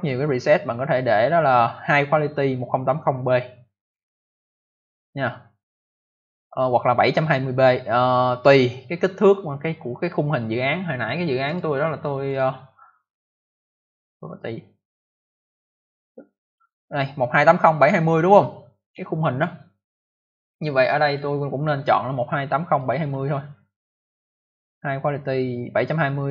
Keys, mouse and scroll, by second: 11.4 click, 11.5 click, 12.2 click, 12.3 click, 14.2 click, 14.3 click, 15.5 click, 21.0 click, 21.1 click, 22.7 click, 22.8 click, 23.1-23.6 scroll down 2.